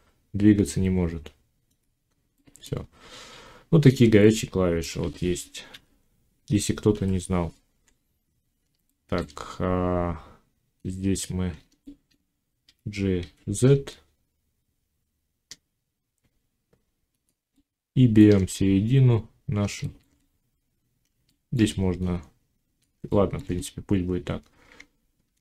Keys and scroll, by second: 12.5 g, 25.0 ctrl+r.